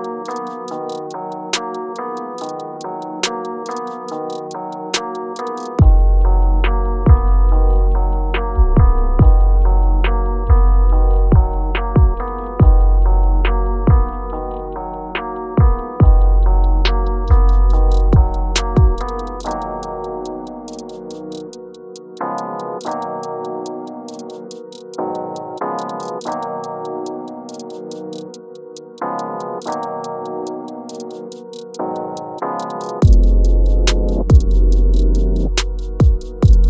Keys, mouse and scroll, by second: 4.4 space, 8.5-10.7 shift+drag, 11.4-13.8 shift+drag, 14.6 scroll down 1, 15.1 click, 15.6-16.3 scroll down 1, 17.5 click, 19.3 space, 23.7 click, 26.0 space, 30.9-31.6 scroll down 1, 31.6-34.1 drag, 34.2-34.7 alt+scroll up 1, 35.1 alt+scroll down 1, 35.2 shift+scroll up 1.